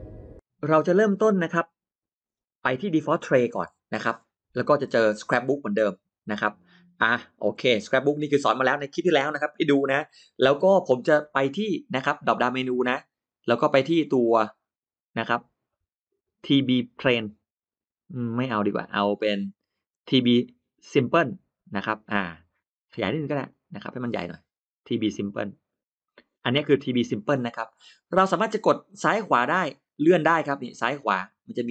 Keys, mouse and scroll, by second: 5.5 click, 12.3 click, 16.9 click, 18.1 click, 21.1 click, 22.7 click, 24.9 click, 29.5 click, 30.4 click, 31.5 click.